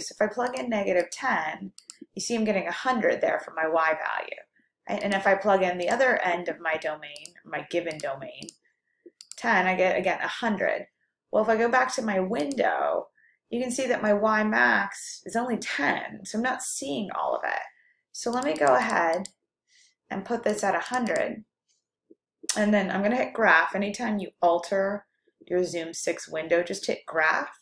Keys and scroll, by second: 0.6 1, 1.2 0, 1.9 Return, 7.2 1, 8.1 1, 8.6 0, 9.3 Return, 18.3 Down, 18.6 Down, 19.0 Down, 20.6 Down, 20.6 1, 21.3 0, 21.9 0.